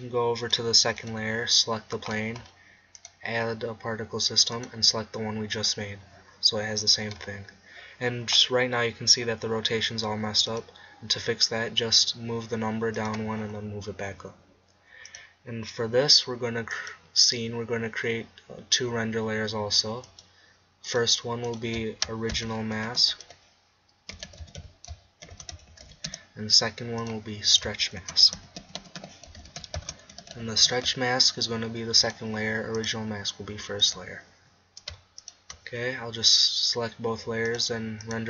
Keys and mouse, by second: 0.5 click, 2.4-4.7 drag, 6.4-6.8 middle drag, 10.6 click, 13.8 middle click, 14.0-16.6 drag, 18.7-20.1 middle drag, 23.0 click, 27.0-29.2 drag, 29.4-32.0 middle drag, 32.0-37.0 drag.